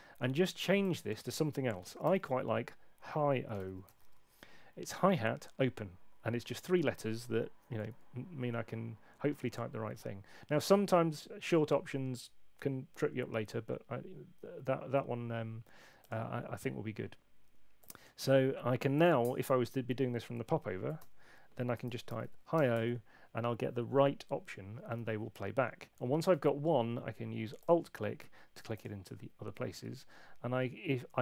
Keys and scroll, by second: 1.8-4.5 typing, 3.5 super+a, 7.9 Tab, 20.9-22.7 typing.